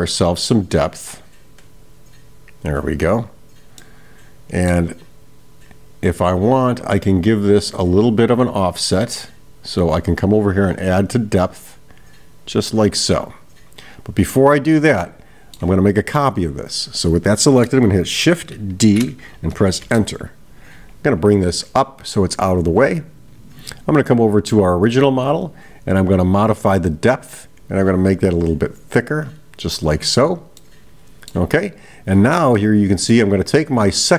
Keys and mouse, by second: 1.8-3.3 drag, 3.8-4.8 middle drag, 11.1-14.4 drag, 15.0-15.7 middle drag, 16.2 click, 22.7 click, 24.1 click, 26.5-30.2 drag, 30.6-31.4 middle drag, 32.0 click, 32.6-33.2 middle drag.